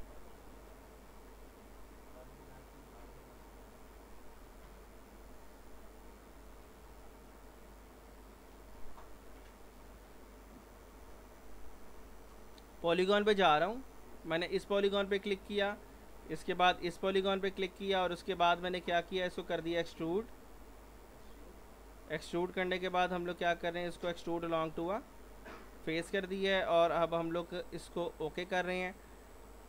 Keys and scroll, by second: 18.0 z.